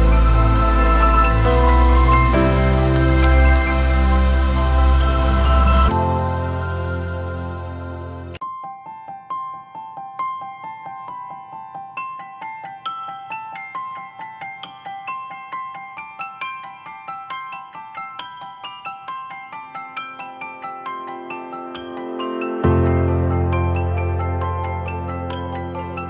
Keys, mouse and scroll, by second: 1.6 ctrl+-, 2.0 ctrl+-, 2.8 ctrl+t, 3.5 alt+shift+click, 7.2 alt+shift+click, 12.1 Return, 13.0 ctrl+=, 13.4 ctrl+=, 14.7-15.1 alt+scroll down 1, 16.7 alt+scroll up 1.